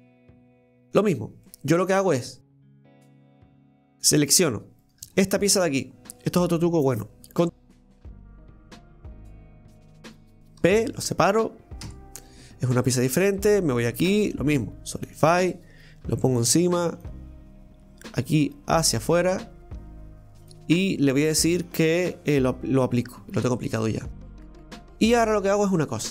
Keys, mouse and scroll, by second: 0.4 middle click, 1.1-1.5 scroll down 1, 1.5 middle click, 2.4 right click, 3.5 click, 4.8 right click, 5.1 alt+shift+right click, 5.3 alt+shift+right click, 7.6 shift+d, 12.2 right click, 13.7 click, 15.2-16.7 drag, 16.9 click, 18.1-21.1 drag, 22.3-23.5 drag, 23.5-24.2 middle drag, 24.2 Tab, 24.6 middle click, 25.4-25.8 scroll up 1, 25.8-26.1 middle drag.